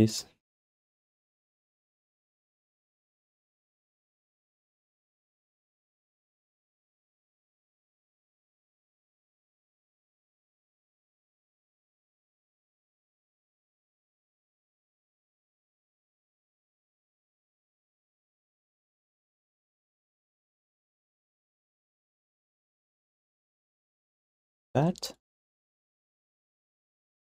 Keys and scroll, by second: 4.7 q, 5.3 alt+shift+d, 7.7 space, 8.3 space, 9.8 r, 13.4 space, 13.7 space, 15.0 q, 21.4 q, 23.4 g, 24.1 alt+d, 24.3 ctrl+s, 26.7 space.